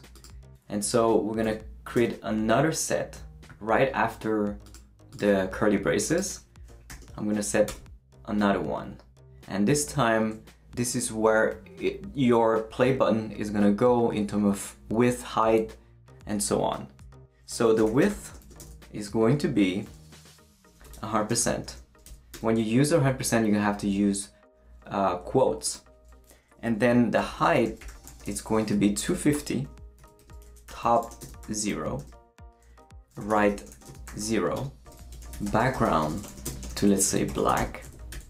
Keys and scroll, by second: 1.4 ,, 2.0 space, 6.9 shift+[, 7.7 shift+Return, 17.4-22.0 typing, 22.3 Return, 23.9 Escape, 26.9-38.1 typing, 30.2 Return, 34.8 Return.